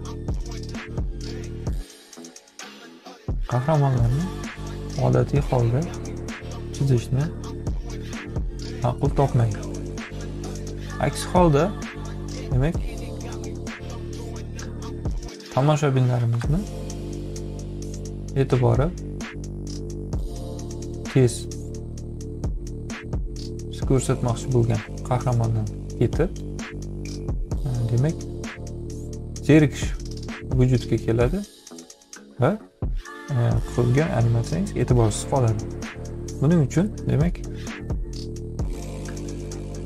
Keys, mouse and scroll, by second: 0.1-1.4 drag, 2.2-4.3 drag, 4.4-9.8 drag, 10.3 ctrl+z, 10.9-16.2 drag, 17.1 click, 18.8 click, 19.9-20.9 drag, 21.3 click, 22.2 click, 23.2 click, 24.2 click, 26.9 F7, 27.8 click, 28.9 ctrl+a.